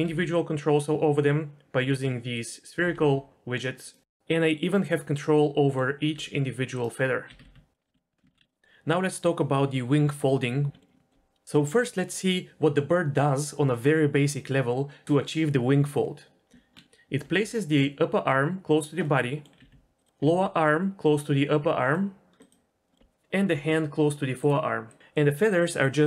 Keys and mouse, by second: 0.2 r, 0.3 r, 2.6 click, 3.0 r, 3.2 r, 4.3 click, 4.4 middle click, 4.6-8.3 typing, 5.2 click, 5.4 click, 6.9 middle click, 7.2 middle click, 7.8 middle click, 8.5 alt+r, 8.5 alt+g, 8.5 alt+s, 10.7 z, 10.8 middle click, 11.0-11.4 middle drag, 16.8 Tab, 17.5 r, 19.4 middle click, 19.9 r, 20.5 r, 22.6 click, 22.7 r, 23.0 middle click, 23.8 r, 24.7 drag.